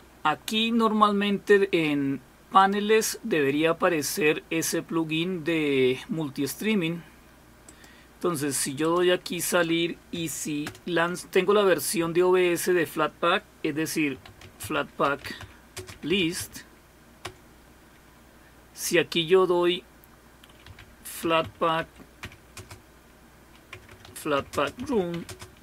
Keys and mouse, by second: 0.0 super+w, 2.6 click, 7.7 click, 8.8-10.2 drag, 10.7 super+Return, 15.0-17.2 typing, 21.8-22.6 typing, 23.7-25.6 typing.